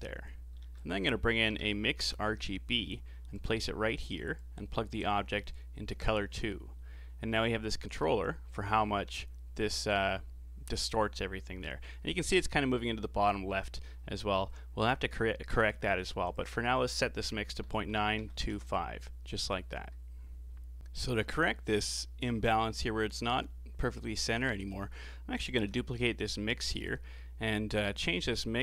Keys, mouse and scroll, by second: 0.6 shift+a, 4.4 click, 6.2 scroll up 4, 7.3-10.4 drag, 16.3-19.3 drag, 20.8-23.4 middle drag, 23.8 middle click, 24.7 click, 25.6 shift+d, 26.7 scroll up 5, 27.0-27.5 middle drag, 27.5 scroll up 4, 28.0-28.6 drag.